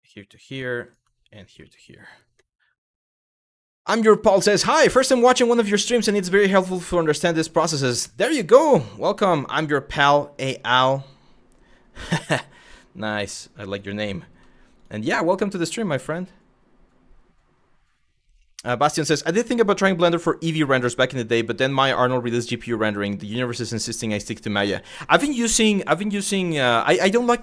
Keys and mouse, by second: 0.0 f, 0.5 click, 1.0 shift+click, 1.2 f, 12.8 1, 13.9 g, 14.4 click, 15.7 shift+middle click.